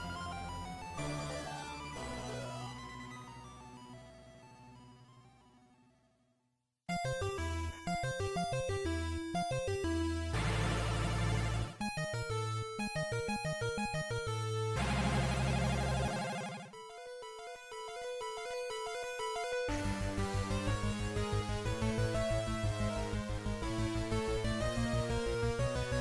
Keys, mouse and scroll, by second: 1.1 click.